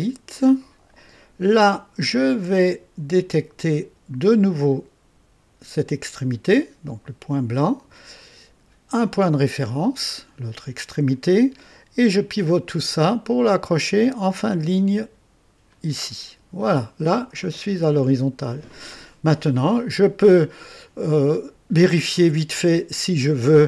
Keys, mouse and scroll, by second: 7.3 click, 10.5 click, 15.6 click, 17.1 scroll up 1, 17.6 scroll down 1, 18.3-19.0 right drag, 21.2 right click, 22.1 click.